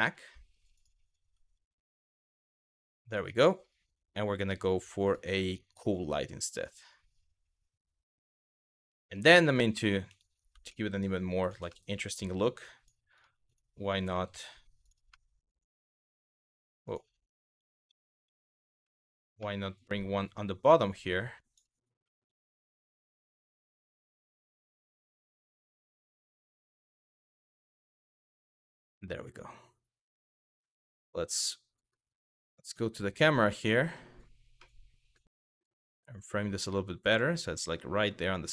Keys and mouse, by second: 0.4 click, 0.8 g, 1.3 click, 4.7 click, 8.6 middle click, 10.3 shift+d, 11.1 click, 11.4 shift+middle drag, 12.8 click, 13.7 f, 14.0 g, 14.5 click, 14.7-15.2 middle drag, 17.3 ctrl+z, 17.5 ctrl+z, 18.6 middle click, 19.0-19.5 middle drag, 20.0 click, 21.8 middle click, 22.8 click, 26.1 click, 29.7 click, 34.2 middle click, 35.0 shift+middle click.